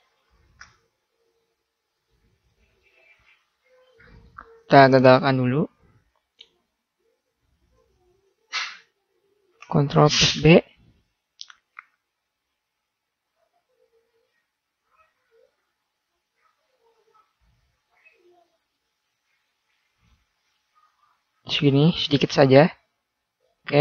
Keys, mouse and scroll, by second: 5.5-10.4 middle drag, 10.4 ctrl+b, 14.9-16.1 middle drag.